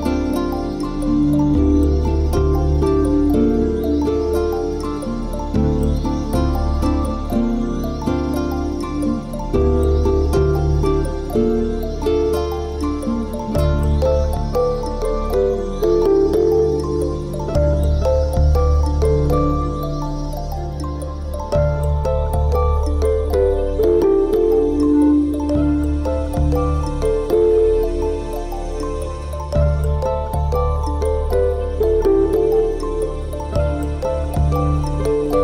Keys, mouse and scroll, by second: 0.8 w, 1.8 middle click, 2.6-2.9 scroll down 7, 2.9 middle click, 3.8 Tab, 3.9 middle click, 4.8 Tab, 5.4 z, 5.6 middle click, 6.6 Tab, 6.8 middle click, 9.1 Tab, 10.6 ctrl+r, 12.8 middle click, 14.2 click, 14.9 ctrl+l, 15.9 click, 16.2 middle click, 16.8 scroll down 4, 17.4 scroll down 3, 17.7 shift+middle click, 18.7 middle click, 19.9 shift+middle click, 20.9 KP_7, 21.6 scroll up 5, 22.4 shift+middle click, 22.9 shift+middle click, 23.9 shift+middle click, 24.2-24.6 scroll down 4, 24.8 a, 25.3 b, 27.9 click, 28.3 b, 30.8 Delete, 33.6 click, 34.6 b.